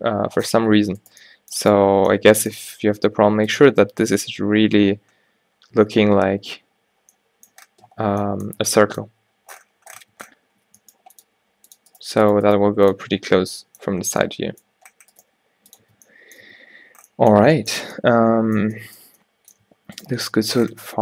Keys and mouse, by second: 0.9 Tab, 2.9 g, 6.1 Tab, 9.4 middle click, 10.1 Tab, 10.8 g, 11.3 g, 12.0-13.5 drag, 12.1 g, 12.6 g, 15.3 g, 15.9 Tab, 16.5 a, 19.7 Tab.